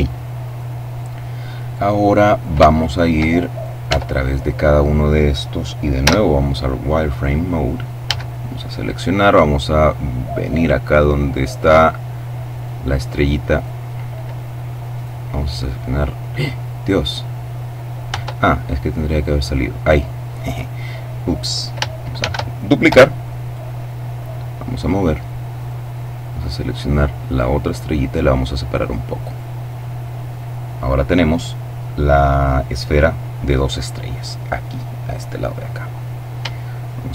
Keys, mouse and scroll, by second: 1.7-2.2 scroll up 1, 2.2-3.6 shift+middle drag, 3.5 shift+Tab, 5.7 z, 6.3-7.3 middle drag, 7.7 a, 8.1-8.9 scroll up 1, 8.9-9.5 scroll down 2, 10.0 right click, 10.7 right click, 12.1 right click, 14.5 right click, 16.2-16.8 scroll up 1, 17.7 Tab, 18.7 right click, 19.4-20.3 scroll down 1, 21.8 shift+d, 22.5 Return, 23.1-24.9 drag, 25.2 right click, 26.0 right click, 27.0-29.4 drag, 35.5-36.1 scroll down 1.